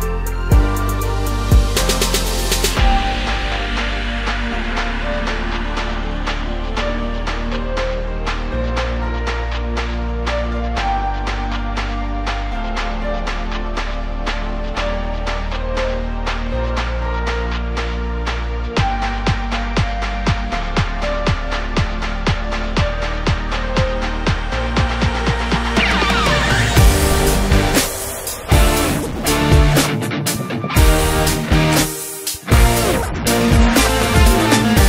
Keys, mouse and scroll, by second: 0.4 click, 1.0 drag, 1.7 click, 2.8 click, 3.7-4.5 drag, 5.1-7.8 drag, 7.8 scroll up 2, 8.8 click, 9.5-11.1 drag, 16.0-17.3 scroll down 5, 17.3-19.3 drag, 20.7 click, 21.6 click, 22.6 shift+click, 23.6 shift+click, 24.4 ctrl+l, 26.8 click, 28.8-29.9 drag, 32.7-34.4 scroll down 1, 34.4-34.8 drag.